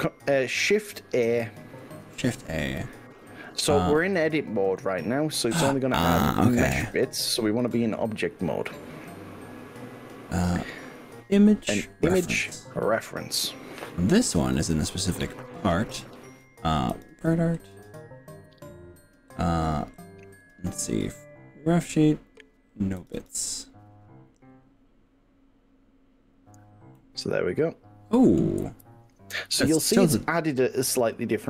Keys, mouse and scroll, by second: 1.8 shift+a, 6.8 Tab, 7.6 shift+a, 26.0-27.0 scroll down 6, 27.0-28.4 middle drag, 29.8 click, 30.8 click.